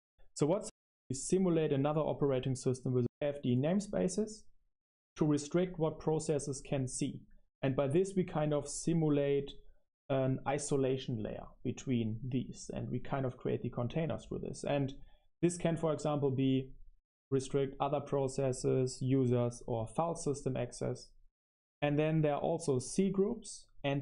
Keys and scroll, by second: 0.0-1.1 typing, 12.2 super+7, 13.3 Escape, 14.2 o, 14.8 BackSpace, 15.8-23.2 typing.